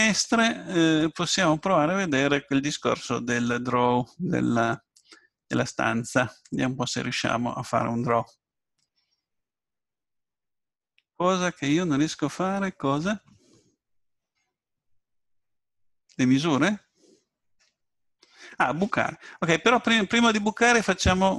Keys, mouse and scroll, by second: 19.1-21.3 middle drag.